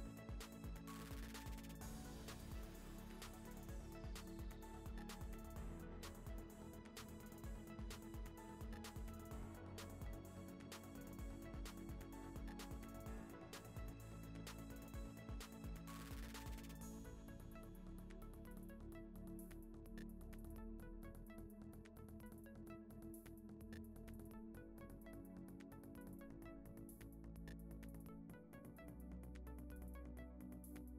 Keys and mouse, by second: 0.0 middle click, 0.5 click, 1.6 click, 4.2 Tab, 4.5 u, 5.2 Tab, 5.7 click, 6.4 click, 7.7 middle drag, 8.1 middle drag, 9.3 click, 12.2 click, 17.1-17.5 middle drag, 17.9 click, 18.8 click, 22.3 click, 22.9 Tab, 23.1 a, 23.6 Tab, 24.1 Tab, 25.1 Tab, 26.1-26.6 drag.